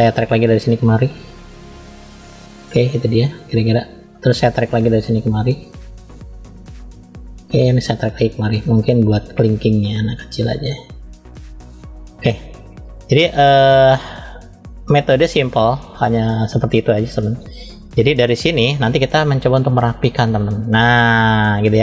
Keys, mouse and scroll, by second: 0.4 click, 5.3 click, 9.0 click, 15.0 click.